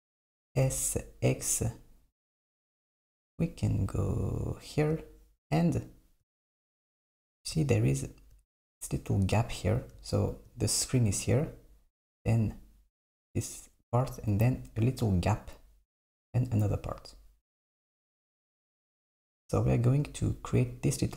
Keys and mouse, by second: 0.4 s.